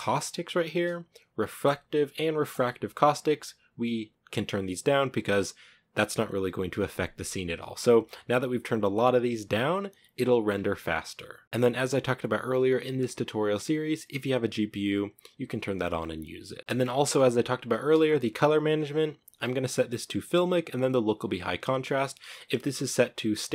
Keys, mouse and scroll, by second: 1.6 click, 2.5 click.